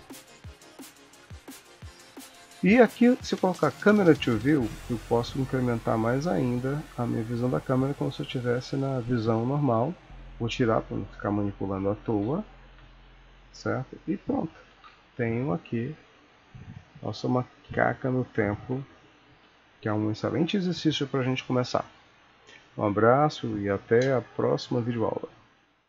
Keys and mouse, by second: 0.5 ctrl+middle click, 1.4 KP_0, 3.6 click, 4.7 ctrl+middle click, 6.1 middle click, 7.0 shift+middle click, 10.8 click, 12.2 Home, 13.0 ctrl+s, 14.9 alt+a, 15.9 n, 17.6 t, 19.3 ctrl+s.